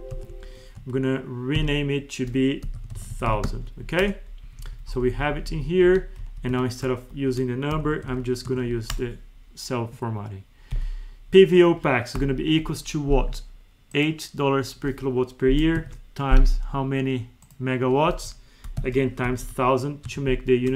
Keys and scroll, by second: 0.0 ctrl+z, 1.5 alt+F3, 4.3 Up, 6.1 Down, 6.4 F2, 6.9 ctrl+shift+Left, 8.4 Tab, 10.6 Down, 19.9 Tab.